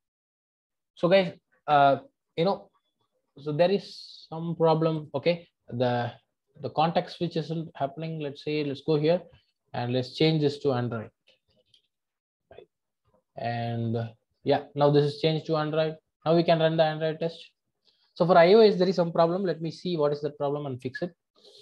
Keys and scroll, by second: 7.3 super+b, 16.4 ctrl+r.